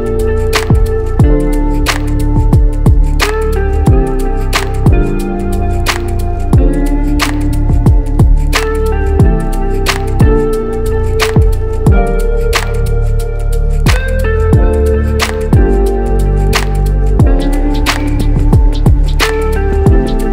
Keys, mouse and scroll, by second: 0.5-2.0 middle drag, 2.4 -, 2.5 KP_Subtract, 2.6 KP_Subtract, 3.8 ctrl+alt+0, 3.9 ctrl+alt+KP_0, 4.6 KP_Add, 4.7 KP_Add, 5.1 KP_Add, 7.8 click, 8.8 click, 10.6-11.0 drag, 12.6 click, 13.5 click, 14.4 click, 15.2 click, 15.8 click, 19.2-20.3 drag.